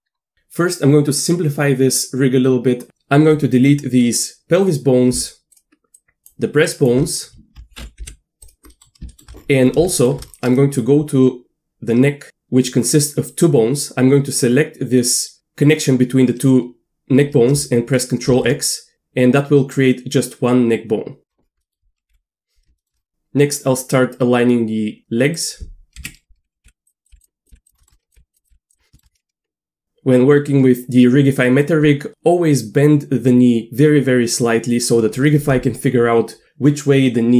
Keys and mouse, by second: 6.0 shift+drag, 6.7 shift+click, 8.0 Delete, 8.7 middle click, 9.1 shift+middle click, 9.9 shift+middle drag, 10.6 click, 10.6 middle click, 14.5-15.4 drag, 18.3 ctrl+x, 21.7 middle click, 22.1 KP_1, 22.8 shift+click, 26.0-28.5 typing, 27.8 shift+middle click, 31.8 d.